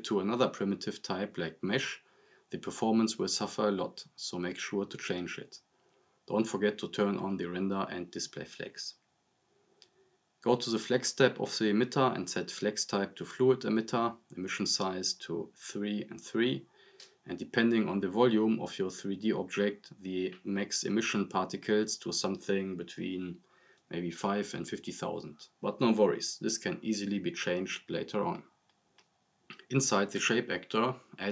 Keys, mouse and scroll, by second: 6.8 click, 10.2 scroll down 1, 13.2-13.8 drag, 24.9-26.2 drag.